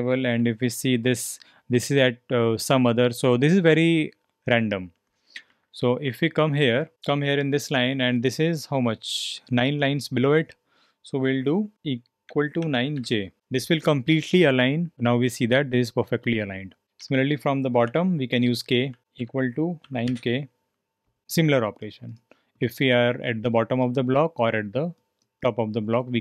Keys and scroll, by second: 0.2 l, 0.3 l, 0.5 l, 0.6 l, 4.4 typing, 5.5-7.4 typing, 12.0-13.4 typing, 17.0-20.5 typing.